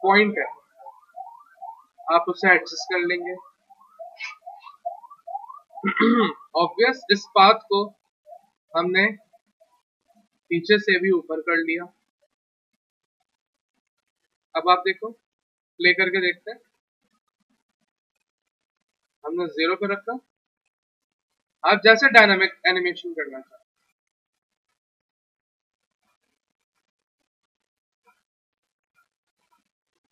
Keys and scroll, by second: 8.7 1, 13.9 1, 16.6 F3, 17.8 F3.